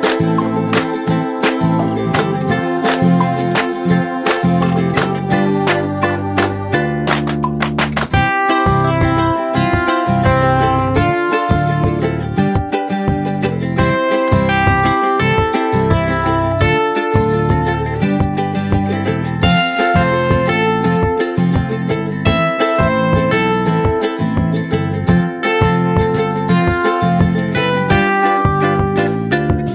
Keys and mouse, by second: 1.9 click, 6.2 click, 8.0 click, 12.1 click, 13.8 click, 16.8 click, 19.7 click, 23.0 click, 25.9 click, 28.2 click.